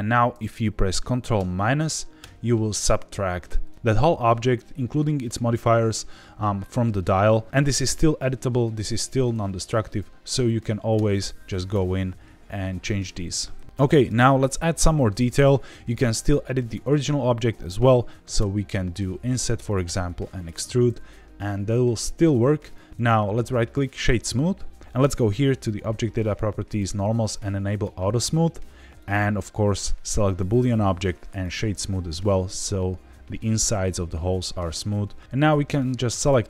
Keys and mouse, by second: 2.2 ctrl+KP_Subtract, 10.9 Tab, 11.7 s, 13.0 Escape, 13.7 Tab, 14.4 click, 18.3 i, 19.6 click, 19.8 e, 20.3 click, 20.5 Tab, 23.0 right click, 25.6 click, 26.7 click, 27.7 click, 29.0 click, 30.4 right click, 35.5-36.3 drag.